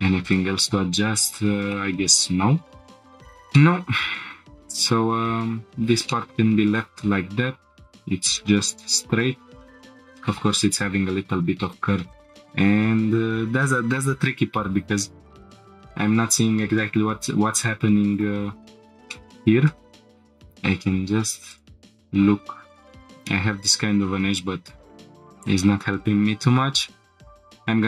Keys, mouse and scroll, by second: 0.2 click, 1.0-1.7 scroll up 4, 1.7 shift+middle click, 3.0 click, 3.1 scroll down 2, 3.5 shift+middle click, 3.9 scroll down 2, 4.2-5.1 scroll up 3, 6.1 middle click, 12.1 click, 12.8 scroll up 1, 16.3-17.0 scroll up 1, 18.1 click, 19.1 shift+middle click, 20.1 middle click, 21.5 click, 21.7 shift+middle click, 21.7 scroll down 2, 22.8 click, 22.8 scroll up 2, 24.2 scroll down 1, 25.0 middle click, 25.0 scroll down 4, 26.4 ctrl+r.